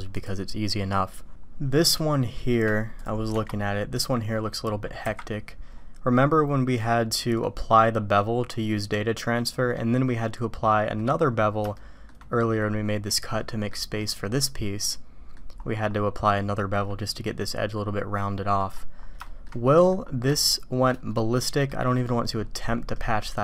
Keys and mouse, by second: 0.0 click, 2.2 shift+click, 2.9-4.0 drag, 5.0 KP_Decimal, 7.2 click, 9.6-11.0 drag, 11.7 shift+middle click, 13.4 middle click, 14.0 middle click, 14.9 click, 17.8-18.6 middle drag, 19.2 shift+drag, 19.6 drag, 20.3-20.9 shift+drag, 21.2 click, 22.9-23.4 drag.